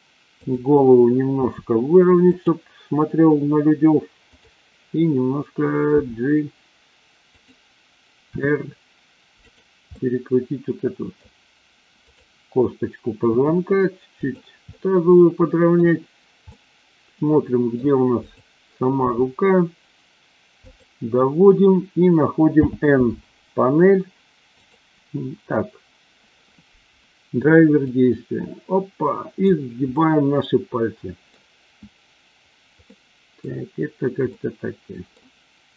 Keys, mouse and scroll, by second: 0.4 click, 1.3 r, 2.3 click, 5.9 g, 7.4 click, 8.3 r, 9.9-11.1 middle drag, 13.3 r, 14.1 click, 14.8-15.8 middle drag, 16.5-17.8 middle drag, 17.8 scroll down 1, 18.3-18.8 drag, 18.9 g, 20.5 click, 22.5 n, 24.5 click, 27.8-29.5 drag, 29.9 scroll up 1, 30.0-31.4 middle drag, 32.9 middle click, 33.4 scroll down 1, 34.3-35.1 middle drag.